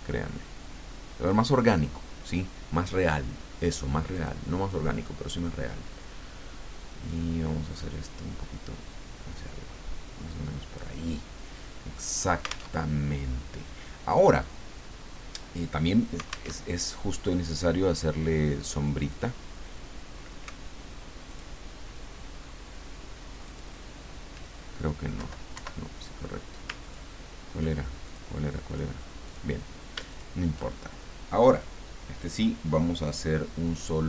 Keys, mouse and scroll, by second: 4.1 click, 7.1-11.2 drag, 12.0 click, 12.8 alt+Tab, 16.5 alt+Tab, 19.0 click, 21.3 alt+click, 23.4 alt+click, 25.2 Down, 25.5 Up, 26.8 ctrl+click, 28.1 ctrl+click, 29.2 click, 30.1 shift+click.